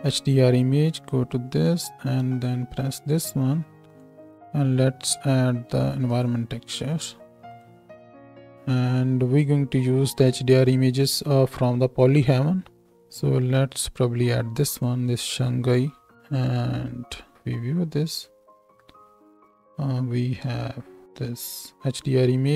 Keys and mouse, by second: 0.9 click, 1.0-2.3 middle drag, 2.3 click, 2.5-4.0 middle drag, 4.0-22.5 drag, 17.3 z, 20.3 z, 21.7-22.5 right drag.